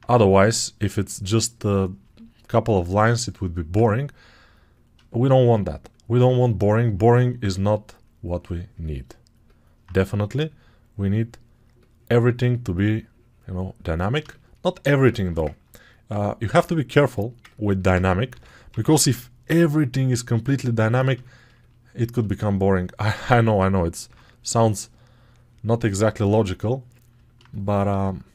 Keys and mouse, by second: 6.1 ctrl+alt+right click, 6.2-14.3 ctrl+alt+drag, 6.3 ctrl+alt+right click, 14.3-21.2 alt+shift+right drag, 18.2 g, 18.6 ], 18.7 ], 21.2 ctrl+alt+shift+click, 21.6 alt+right click, 22.0-28.3 alt+shift+drag, 23.9 2.